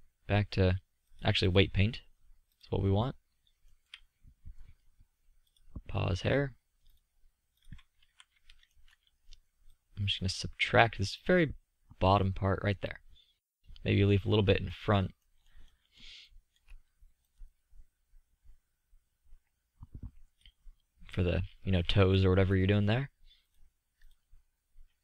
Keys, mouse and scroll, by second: 1.2 drag, 8.0 z, 8.7 drag, 13.9 middle click, 18.2-19.1 drag, 19.1 middle click.